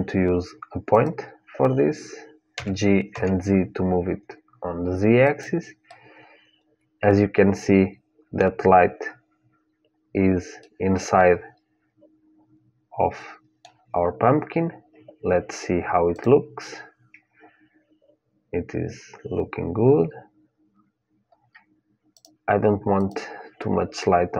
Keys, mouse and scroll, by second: 2.4 g, 5.7-7.7 middle drag, 8.6-12.3 middle drag, 13.6-15.9 scroll up 1, 15.9-17.9 drag, 20.3 scroll up 1, 20.4-22.0 middle drag, 22.0-24.3 drag.